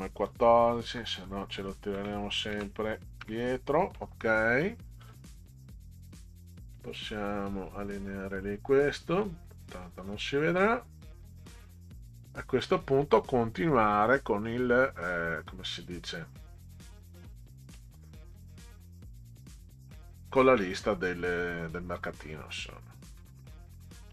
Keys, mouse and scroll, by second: 0.3 click, 0.9 Delete, 2.0 Delete, 2.5 Delete, 3.2 Delete, 4.2 click, 5.0 click, 6.8-8.3 drag, 9.2 click, 9.8-12.2 drag, 17.3 middle click, 20.0-24.1 middle drag.